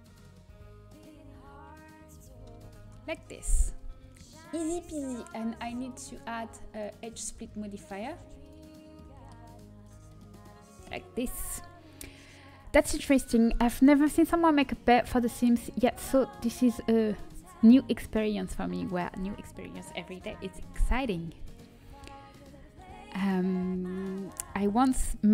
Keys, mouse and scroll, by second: 2.7 Tab, 2.7 a, 5.2-7.7 drag, 8.4-12.6 drag, 9.5-12.6 middle drag.